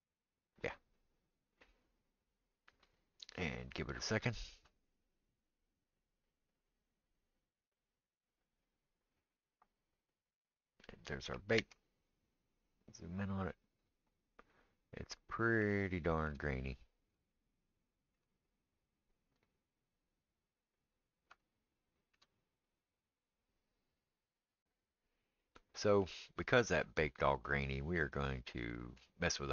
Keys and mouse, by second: 11.7 ctrl+space, 24.6-29.5 middle drag.